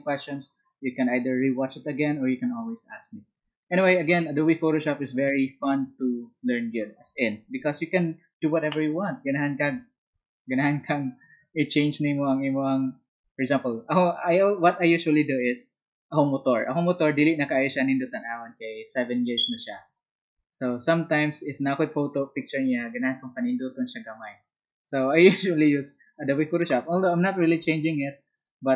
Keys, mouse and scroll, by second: 28.3 shift+click.